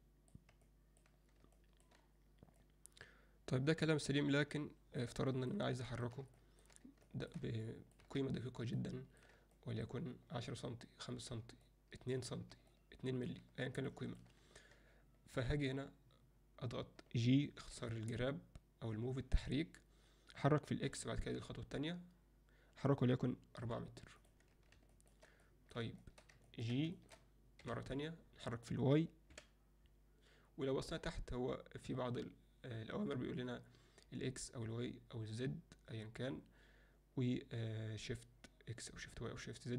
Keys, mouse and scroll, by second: 0.7-1.1 middle drag, 1.5-1.9 alt+shift+middle drag, 2.7-5.0 drag, 5.3 ctrl+middle click, 5.8 alt+middle click, 6.4 ctrl+alt+middle click, 7.1 alt+shift+middle drag, 7.6-7.9 ctrl+alt+middle drag, 8.8-9.2 ctrl+alt+middle drag, 9.5 middle click, 11.7 ctrl+middle click, 12.7-13.3 ctrl+middle drag, 13.9 ctrl+click, 24.9 alt+shift+middle click, 25.5 middle drag, 26.0 alt+shift+middle click, 26.5 ctrl+alt+middle click, 27.0 alt+shift+click, 27.6 g.